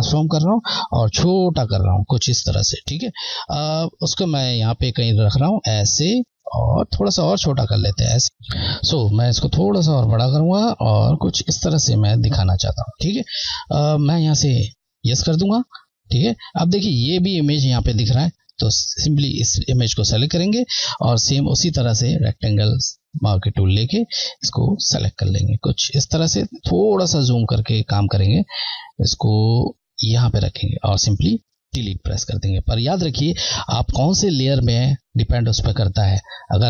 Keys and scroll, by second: 1.0 Left, 3.6 Left, 7.1 Left, 9.6 Left, 14.9 Left, 19.2 Left, 26.2 scroll, 26.8-28.0 scroll, 29.6 Left, 32.0 Delete.